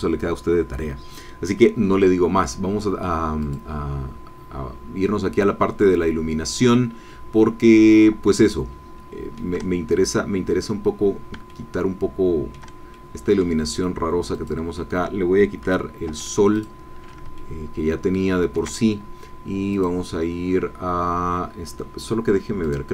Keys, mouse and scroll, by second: 6.3-7.1 scroll down 6, 7.5-8.0 scroll up 2, 8.4-9.5 shift+middle drag, 10.6 scroll down 2, 11.4-12.7 shift+middle drag, 12.9 shift+middle click, 14.3 middle click, 16.0 x, 16.5 click, 17.3-18.7 shift+drag, 19.9 click, 22.6 click.